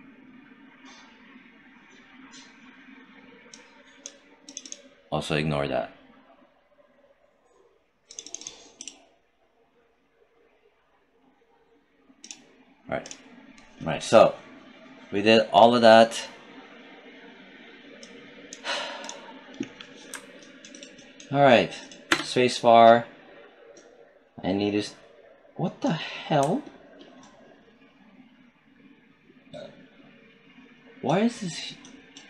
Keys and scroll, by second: 21.9 space.